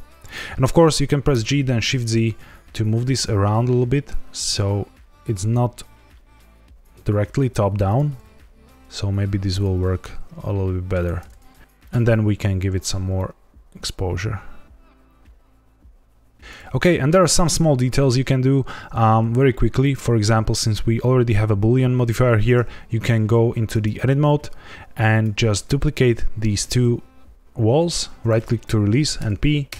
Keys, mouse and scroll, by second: 0.2 click, 1.2 g, 1.7 shift+z, 7.8 click, 8.0 g, 8.1 z, 9.5 click, 9.7 g, 9.9 shift+z, 10.9 click, 11.6 click, 11.6-12.2 scroll down 3, 11.7 click, 13.1 shift+click, 16.7 scroll up 1, 19.7 click, 23.7 Tab, 25.0 click, 25.5 shift+click, 26.5 shift+d, 27.7 right click, 29.1 p.